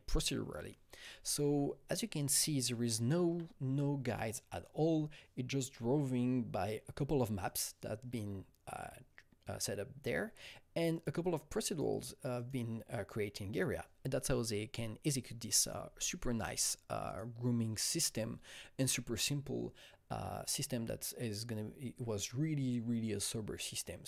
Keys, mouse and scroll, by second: 1.8-2.5 scroll down 3, 2.8 alt+middle click, 2.8-3.1 alt+scroll, 3.5-5.4 scroll, 6.5 alt+middle click, 6.5 scroll down 1, 6.5-7.4 scroll up 2, 7.4 click, 10.9 scroll up 1, 10.9 click, 11.6 click, 12.3 click, 13.5 click, 15.6 click, 15.7 space, 17.0 click.